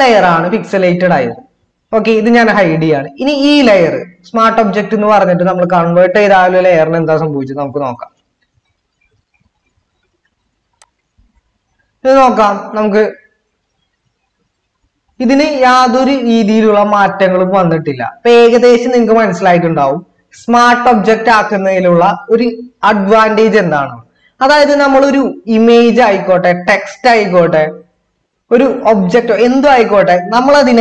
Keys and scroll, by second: 6.6 ctrl+-, 12.7 ctrl++.